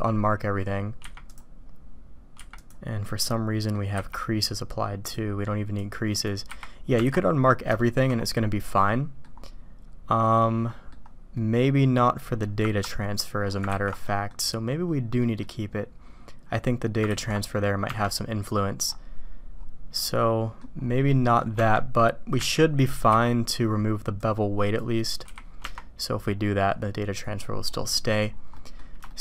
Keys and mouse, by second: 3.2 click, 3.9 n, 5.0 click, 5.8 click, 6.9 Tab, 7.7 shift+middle click, 8.7-9.2 drag, 10.2-10.9 drag, 11.3 middle click, 17.8 Tab, 20.0-20.6 drag, 21.0-21.4 drag, 22.3 a, 23.0 n, 24.1 click, 25.2 n, 25.6 Tab, 27.9 drag, 28.6 drag, 29.0 shift+click.